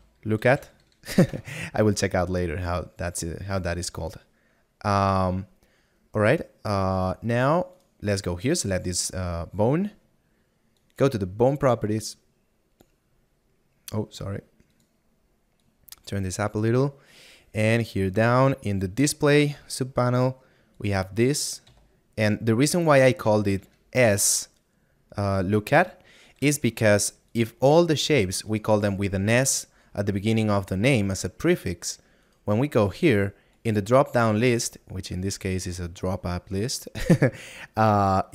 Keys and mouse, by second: 12.0 click, 16.1 click, 17.6 middle click, 23.6 BackSpace.